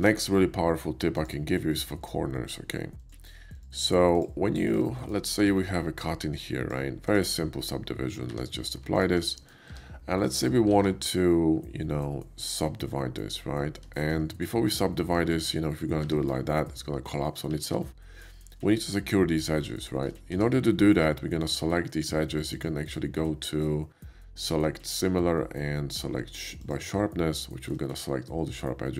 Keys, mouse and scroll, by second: 1.2 click, 1.5-1.9 middle drag, 3.0 click, 3.4 click, 4.1 click, 4.5 middle drag, 5.0 shift+middle click, 5.4 alt+w, 6.1-6.7 drag, 7.1 click, 8.3 q, 8.9 alt+click, 9.3 middle click, 9.7 Tab, 10.2 middle drag, 11.3 alt+x, 11.3-12.6 middle drag, 13.9 shift+middle click, 14.4 shift+middle click, 15.3 Tab, 15.9 ctrl+Tab, 16.0 ctrl+2, 16.5-17.4 middle drag, 17.6 ctrl+z, 18.3 ctrl+shift+z, 18.3 middle drag, 18.7 middle click, 19.8 middle click, 20.3 Tab, 21.4 click, 22.5 click, 26.6 click, 27.5 shift+middle click, 27.9-28.9 shift+middle drag.